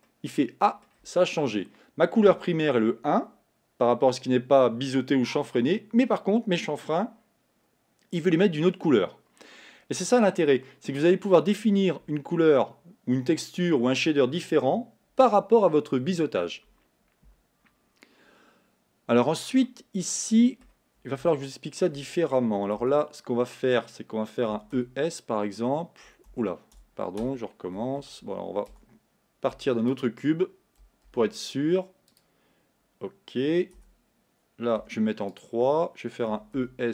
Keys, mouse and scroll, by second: 0.0-22.8 middle drag, 22.8 Tab, 24.6 e, 28.8 Tab, 30.1 x, 32.5 shift+a, 33.8 Tab, 34.8 3, 35.4 click, 36.3 e.